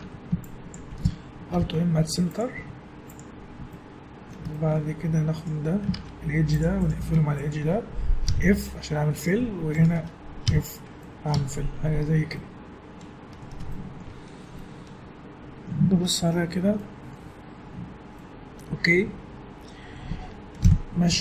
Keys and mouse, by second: 0.0 a, 1.5 alt+m, 2.6 z, 3.5-5.4 middle drag, 5.4 click, 6.0 ctrl+Tab, 6.6 click, 8.3 f, 9.1 click, 9.8-11.2 drag, 10.5 f, 11.3 Tab, 12.6-15.1 middle drag, 20.6 KP_1, 21.1 z.